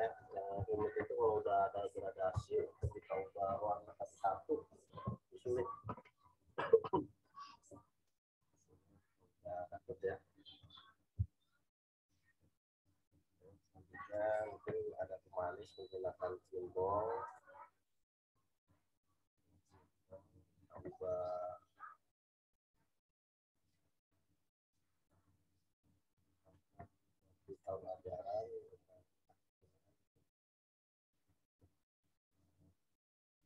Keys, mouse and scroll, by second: 0.1 ctrl+alt+z, 5.7 m, 6.3 click, 14.1 right click, 17.3 click, 20.0 click, 22.4 click, 27.6 click.